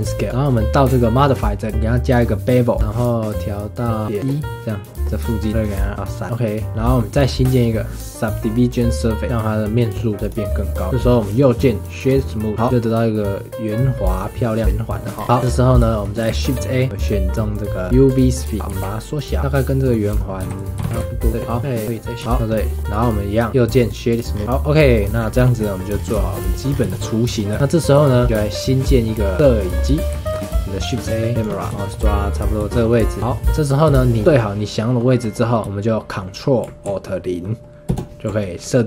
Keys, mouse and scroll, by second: 1.2 click, 1.7-4.1 drag, 5.0 middle click, 5.5 click, 6.2-7.1 middle drag, 7.1-9.2 drag, 9.2-10.2 middle drag, 10.2 click, 10.5-10.8 middle drag, 10.8 scroll up 2, 10.9-11.3 middle drag, 11.3 right click, 12.5-14.6 middle drag, 14.6 scroll up 1, 14.9 middle click, 15.1 scroll down 2, 15.3-16.3 shift+middle drag, 16.3 shift+a, 18.6 middle click, 18.7-20.9 typing, 21.4 middle click, 22.4 scroll down 3, 22.5-22.9 middle drag, 22.9 click, 23.5 right click, 24.1 click, 24.3 scroll down 5, 24.6-25.2 middle drag, 25.2 scroll down 2, 25.4-25.9 shift+middle drag, 25.9 scroll up 3, 26.2-26.7 shift+middle drag, 26.7 scroll down 4, 26.9-27.3 shift+middle drag, 27.3 scroll down 1, 27.6-28.0 scroll up 2, 28.0-30.1 shift+middle drag, 30.1 shift+a, 31.7 scroll up 4, 31.8-37.9 shift+middle drag, 37.9 ctrl+alt+KP_0.